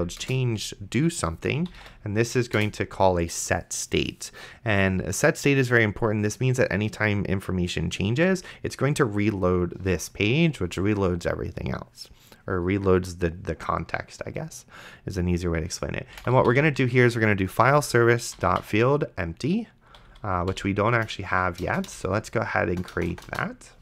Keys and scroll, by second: 0.2 Return, 1.4-2.5 typing, 2.6 Return, 16.1-17.0 typing, 17.6 Return, 18.1-21.6 typing.